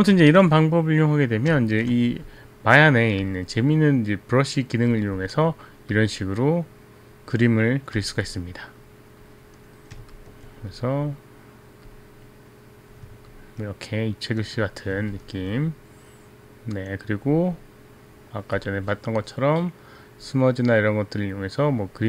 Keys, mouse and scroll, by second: 0.4 ctrl+z, 1.7 ctrl+z, 3.4 click, 5.1 click, 6.1 click, 8.1 click, 9.3 click, 10.3 alt+click, 10.8 click, 12.0 click, 13.4 alt+click, 15.4 alt+click, 18.7 click.